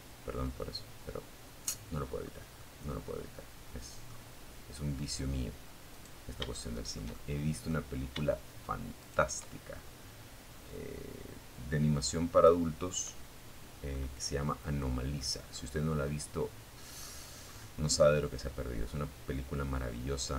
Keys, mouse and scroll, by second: 0.4 scroll up 2, 0.8 middle click, 1.0 scroll up 1, 4.1 right click, 4.7-6.0 shift+middle drag, 7.2 shift+right click, 8.8-10.8 right drag, 11.0-12.0 scroll down 3, 12.1-13.9 middle drag, 14.2-15.4 middle drag, 15.6-16.0 scroll up 1, 16.0-20.3 middle drag.